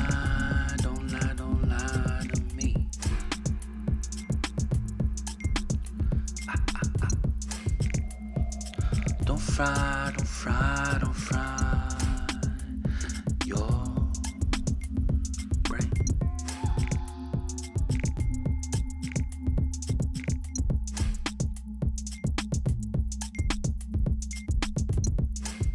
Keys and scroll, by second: 0.1 Return, 2.1 ctrl+t, 3.6 Up, 3.7 Up, 3.9 Up, 4.1 Left, 4.6 Return, 10.0 ctrl+g, 11.2-12.7 typing, 16.0 ctrl+t, 19.4 ctrl+z, 19.7 Return, 20.8 ctrl+t, 24.8 Return.